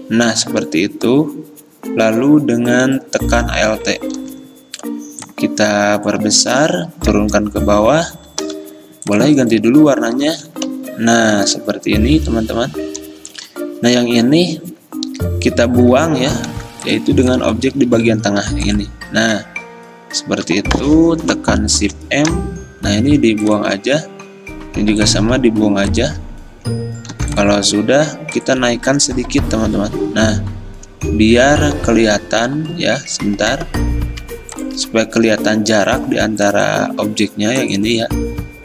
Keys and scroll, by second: 4.3 v, 8.5 i, 10.2 v, 10.8 ctrl+[, 16.6 v, 17.5 v, 17.9 ctrl+z, 21.9 m, 24.5 m, 27.2 v, 29.6 Up, 29.8 Up, 30.0 Up, 30.2 Up, 30.5 Up, 30.8 Up, 31.0 Up, 31.8 Down, 32.5 Down, 33.2 Up, 37.0 ctrl+z.